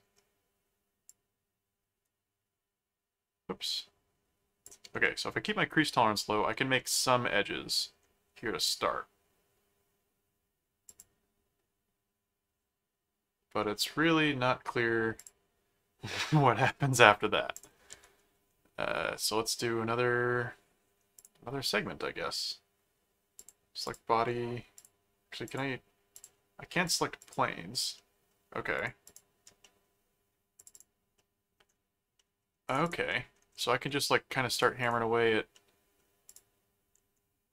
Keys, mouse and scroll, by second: 1.1-4.6 drag, 5.0-6.4 middle drag, 6.7-7.9 middle drag, 10.9 click, 15.1 click, 17.5 click, 17.9 s, 21.1 click, 23.3 click, 24.8 click, 25.5 click, 26.2 click, 26.8 click, 27.9 middle click, 28.7 click, 29.6 middle click, 30.6 click, 31.2 middle click, 32.2 middle click, 32.7 click, 33.1 middle click, 34.5 click, 35.5 middle click, 36.3 click.